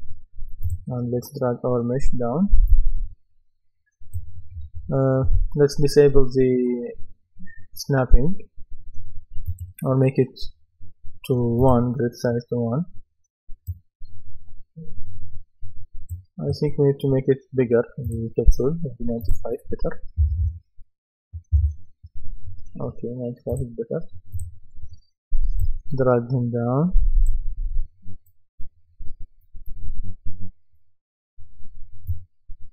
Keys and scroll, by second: 20.2 KP_9, 21.5 Return.